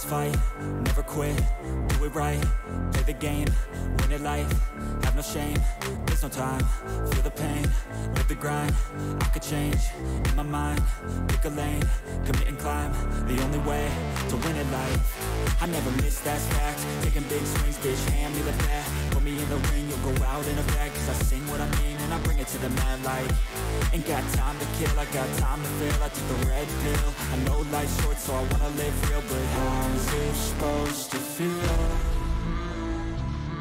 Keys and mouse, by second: 0.2 click, 1.0 shift+click, 3.8-5.2 drag, 8.3-9.9 drag, 11.3 click, 11.9 shift+click, 13.7-15.1 drag, 17.8-18.9 drag, 20.0 click, 21.9-23.2 drag, 24.0 click, 24.4 shift+click, 26.1-27.3 drag, 31.0-32.3 drag.